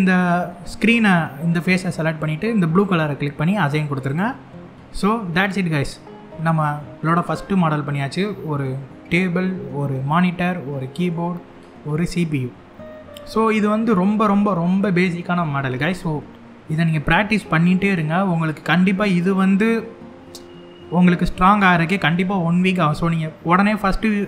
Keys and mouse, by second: 0.3 click, 2.5 click, 5.0-6.8 middle drag, 8.4 middle click, 10.4 middle click, 15.1 middle click.